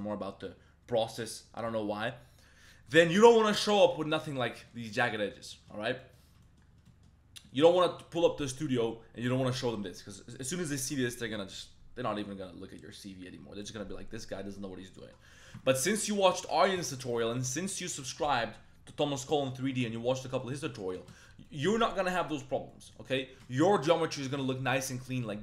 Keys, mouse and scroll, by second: 4.1 middle click, 4.6 shift+middle click, 4.9 middle click, 5.1 middle click, 5.5 shift+middle drag, 5.9 middle click, 6.4 shift+drag, 6.8 shift+drag, 7.3 click, 7.8 click, 8.4 click, 15.0 middle click, 15.3 middle click, 15.6-16.0 shift+middle drag, 16.1 middle drag, 16.4 shift+middle drag, 16.8 middle click, 17.1 middle click, 17.5 middle click, 19.3-19.7 middle drag, 21.4 middle drag, 22.7 middle click, 23.4 shift+drag, 23.5 middle click, 23.6 Tab, 24.2 Tab, 25.2-25.4 middle drag.